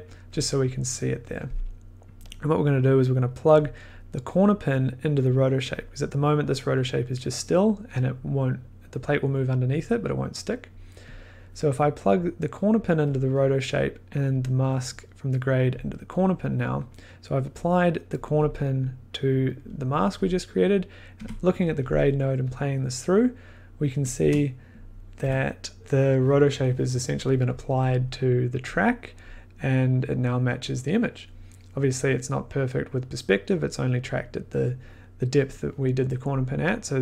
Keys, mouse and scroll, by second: 0.1 click, 2.2 click, 3.2 click, 3.9 click, 4.8 click, 5.6 click, 6.5 click, 11.1 click, 12.7 click, 13.6 click, 15.2 click, 16.1 click, 16.9 click, 18.1 click, 18.5 click, 20.7 click, 21.2 1, 22.5 click, 24.1 click.